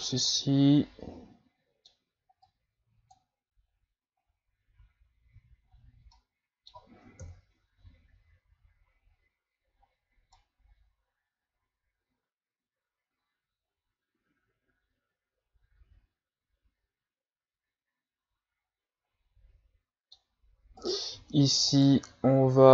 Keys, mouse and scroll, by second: 0.3-2.4 middle drag, 2.4-5.3 drag, 5.3 a, 5.7-6.0 scroll down 3, 6.1-7.2 middle drag, 7.2 KP_3, 9.7-10.0 scroll up 3, 10.3-13.3 middle drag, 20.8 right click, 21.7 shift+right click.